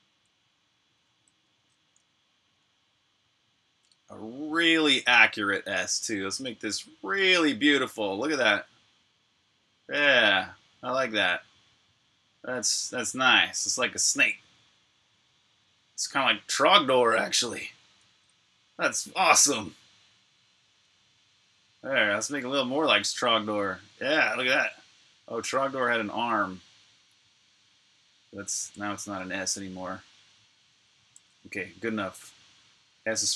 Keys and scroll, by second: 1.2-2.1 typing, 28.8-29.5 typing.